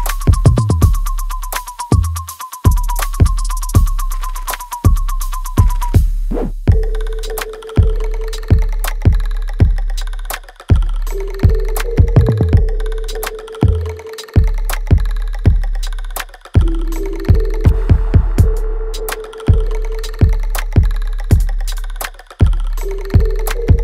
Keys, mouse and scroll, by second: 0.3 alt+right click, 1.4 ctrl+z, 8.8 click, 9.2 alt+right click, 10.1-11.8 alt+drag, 11.8 alt+right click, 13.1 click, 13.4 alt+click, 15.5 click, 16.0 right click, 17.1 click, 18.6-20.3 drag, 23.5 alt+right click.